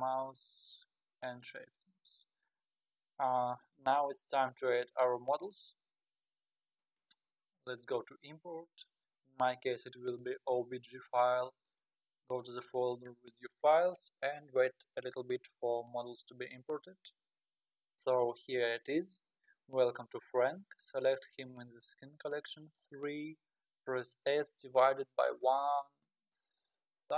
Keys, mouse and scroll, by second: 2.1-2.8 scroll up 4, 4.6 click, 6.8-10.0 drag, 21.6 click, 24.3 s.